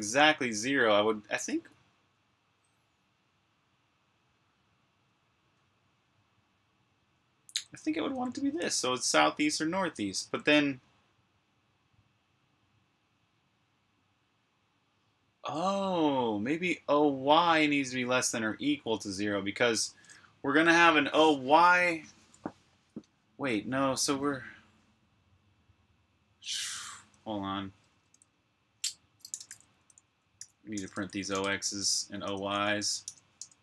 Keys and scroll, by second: 2.1 typing, 4.5 typing, 7.1-10.6 typing, 29.1-33.5 typing.